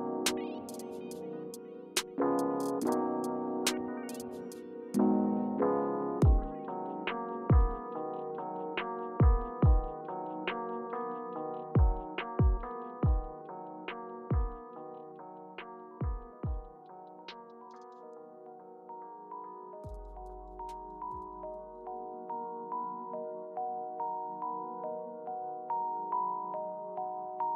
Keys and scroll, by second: 1.5 alt+v, 1.8 alt+h.